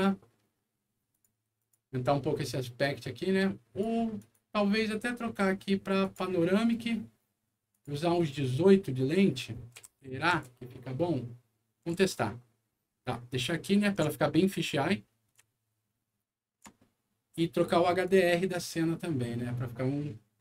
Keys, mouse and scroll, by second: 1.1 click, 1.6 click, 2.8 click, 4.2 click, 6.0 click, 7.7 click, 9.8 KP_1, 10.0 KP_8, 10.3 Return, 12.0-13.9 shift+middle drag, 14.2-15.2 shift+middle drag, 15.5-18.0 shift+middle drag, 18.0 shift+click.